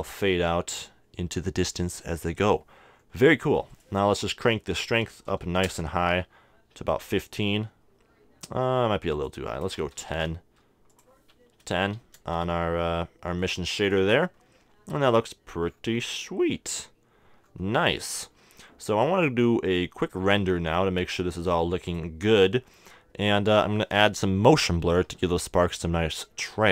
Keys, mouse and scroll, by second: 2.9 middle click, 3.7-5.6 drag, 9.1-12.7 drag, 13.4-15.3 drag, 15.7-18.1 middle drag, 19.7-23.2 drag, 23.3-25.0 drag.